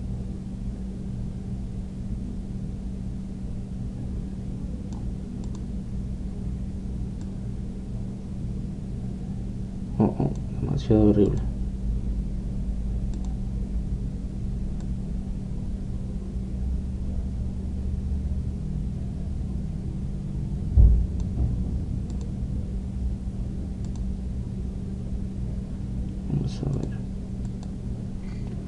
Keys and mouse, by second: 0.8 click, 6.7-10.2 drag, 12.6-27.3 drag, 27.8 click.